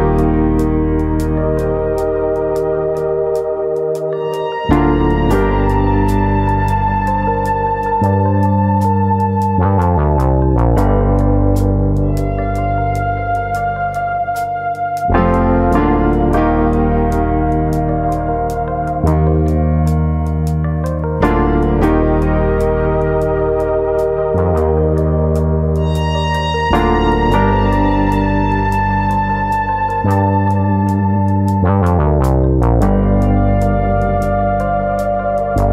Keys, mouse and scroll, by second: 0.2 middle click, 0.8 shift+click, 1.0 middle click, 1.6 click, 2.6 middle click, 2.9 middle click, 3.6 click, 4.2 shift+click, 4.5 middle click, 5.0 click, 5.7 click, 6.0 shift+click, 6.0 middle click, 6.5 click, 7.6 middle click, 8.3 click, 8.5 middle click, 9.3 click, 10.1 middle click, 10.6 shift+middle click, 10.9 middle click, 11.4 click, 12.1 g, 12.9 click, 13.2 click, 13.4 g, 14.1 click, 14.4 scroll down 1, 14.8 click, 15.0 g, 15.7 click, 16.1 click, 16.3 g, 16.9 click, 17.3 click, 17.5 g, 18.1 click, 18.7 click, 18.9 g, 19.9 click, 20.3 click, 20.4 g, 21.3 click, 21.6 click, 21.8 g, 22.7 click, 23.2 click, 23.7 g, 24.3 click, 24.9 click, 25.0 g, 25.8 click, 26.0-26.8 scroll down 2, 26.2 middle click, 26.8-27.3 scroll up 1, 27.6 click, 27.6 scroll up 1, 27.8 g, 28.5 click, 28.9 click, 29.1 g, 29.9 click, 30.1 middle click, 30.8 click, 31.0 middle click, 31.4 middle click, 32.1 click, 32.3 g, 34.3 click, 34.8 click, 34.9 g, 35.5 click.